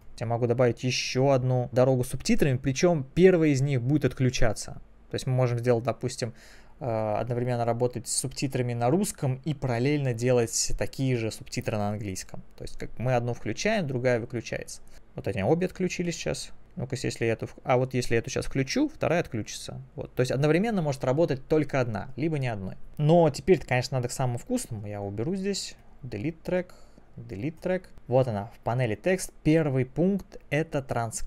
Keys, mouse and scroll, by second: 0.5 click, 3.4 click, 18.5 n, 22.9 click, 24.7 right click, 25.8 click, 26.8 right click, 27.6 click, 27.9 click.